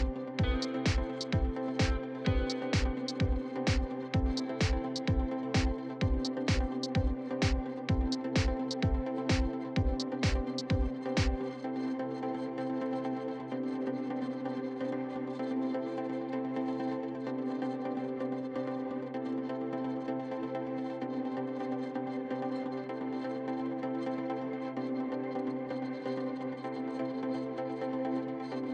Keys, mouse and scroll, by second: 0.2 click, 0.4 scroll down 1, 0.5 middle click, 0.9-1.5 scroll up 2, 1.0 middle click, 1.5 middle click, 1.7 alt+click, 1.9 middle click, 2.6 alt+click, 3.2 ctrl+z, 3.3 ctrl+z, 4.1 click, 5.0 middle click, 5.2-6.3 drag, 7.5 shift+middle click, 8.3 alt+click, 8.4 middle click, 8.6-9.7 drag, 9.8 middle click, 10.4-10.8 scroll up 2, 10.6 alt+click, 10.8 middle click, 11.2 click, 12.5 scroll down 3, 12.6 middle click, 13.0-15.0 shift+middle drag, 15.0 alt+click, 15.4 KP_1, 15.8 scroll up 2, 16.1 alt+click, 16.4 middle click, 17.0-18.1 drag, 19.5 middle click, 20.1 alt+click, 20.3 middle click, 20.5 click, 21.0 middle click, 21.9 alt+click, 22.0-23.1 middle drag, 23.1-24.4 drag, 25.5 alt+click, 25.6 middle click, 25.9 click, 27.8 middle click, 28.0 scroll up 2, 28.2 middle click.